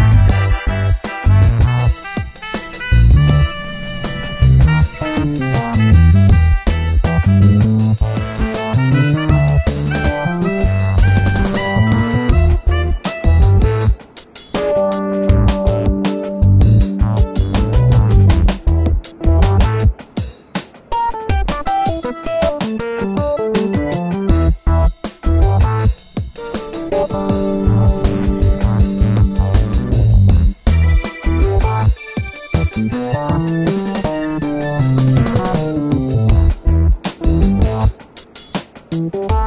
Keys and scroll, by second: 0.5 super+=, 2.3 alt+super+t, 2.4 alt+super+t, 4.2 Return, 4.9 super+t, 8.9 Return, 16.0 super+=, 16.4 super+-, 18.7 ], 19.2 ], 20.1 v, 20.6 super+t, 22.5 Return, 22.9 alt+super+=, 24.7 super+t, 25.1 Return, 27.0 super+-, 27.6 m, 28.1 super+d, 32.0 super+=, 32.5 alt+shift+super+t, 33.6 Return, 36.9 Return, 38.9 m, 39.2 v.